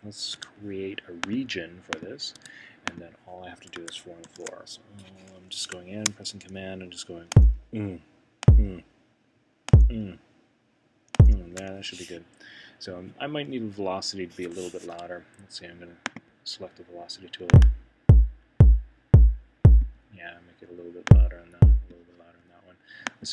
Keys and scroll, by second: 0.3 Home, 4.2 super+6, 14.9 Escape.